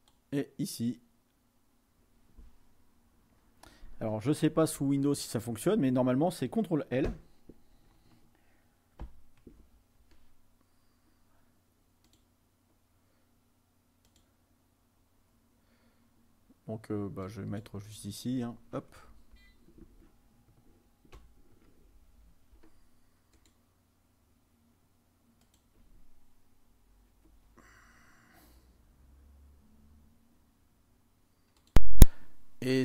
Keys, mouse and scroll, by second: 9.1 ctrl+l, 12.2-13.4 drag, 14.2-15.4 drag, 17.3 click, 19.2 Left, 19.3 Left, 21.2 ctrl+v, 23.5-24.7 drag, 25.5 click, 31.7 click.